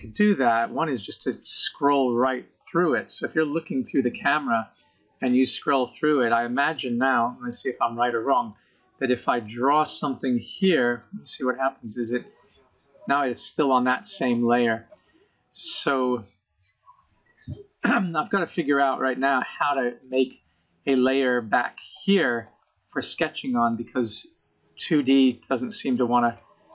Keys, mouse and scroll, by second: 1.2-3.0 scroll down 29, 3.0 KP_0, 3.6-5.5 scroll up 26, 7.8 click, 10.5-11.3 scroll down 22, 11.7 scroll up 1, 11.8 middle click, 14.6-17.4 scroll up 5, 17.4 scroll up 1, 17.5 middle click, 20.4 click, 21.2 click, 21.8 click, 22.2 middle click, 23.7 click, 24.8 middle click, 26.3 click.